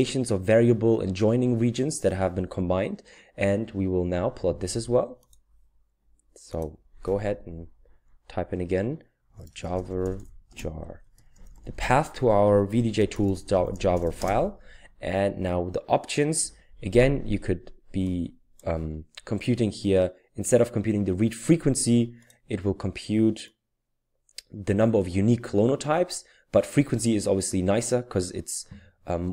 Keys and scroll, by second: 9.1-14.6 typing.